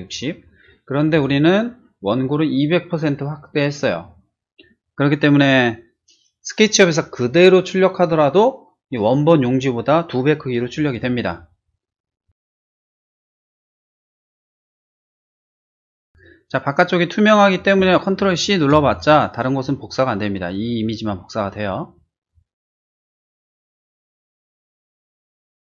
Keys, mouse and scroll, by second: 1.1 click, 12.7 click, 13.9 click, 14.6 click, 14.7 click, 15.4 click, 15.6 click, 16.2 click, 18.7 ctrl+c, 22.2 click, 23.6 click, 24.4 drag, 24.7 ctrl+v.